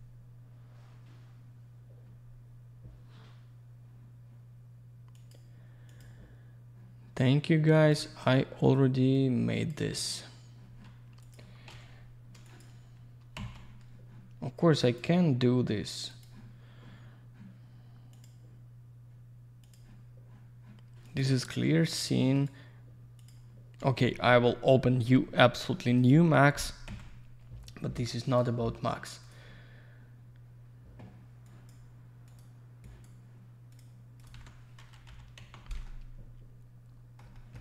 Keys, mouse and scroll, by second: 11.2 click, 11.3 click, 12.0 scroll down 1, 12.5 click, 13.4 z, 14.8 click, 15.0 click, 16.4 click, 18.1 click, 18.2 click, 20.0 click, 22.4 right click, 23.2 click, 25.9 click, 26.0 click, 26.9 z, 28.2 click, 28.4 click, 29.2 click, 29.3 click, 31.5 click, 32.3 click, 32.4 click, 32.8 click, 33.7 click, 33.8 click, 34.2 click, 34.3 alt+double click, 34.3 alt+w, 35.1 p, 35.9 alt+middle click, 37.4 middle click, 37.5 middle click.